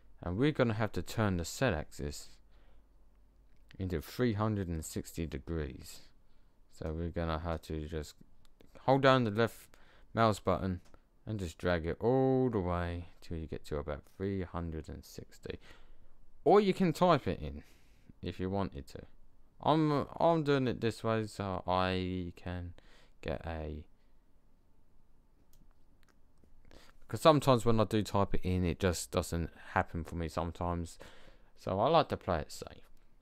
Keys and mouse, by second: 6.8-9.0 drag.